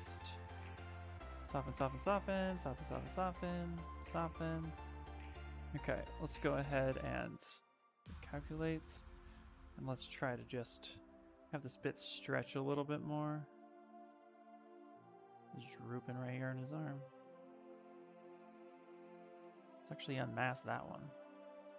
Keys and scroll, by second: 16.5 Escape, 18.8 ctrl+z.